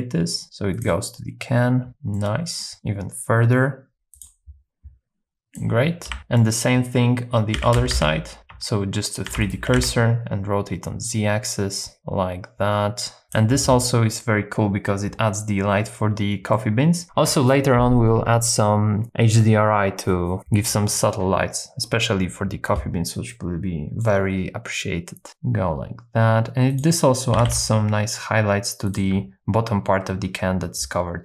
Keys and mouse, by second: 2.2 middle click, 2.4 click, 2.7 g, 2.7 z, 4.2 click, 5.3 click, 6.4 middle click, 7.6 s, 7.8 x, 7.9 x, 9.3 shift+d, 9.4 right click, 9.7 r, 9.8 z, 13.3 click, 16.6 middle click, 23.3 middle click, 25.3 r, 25.3 z, 26.8 click, 27.3 g, 28.9 shift+click.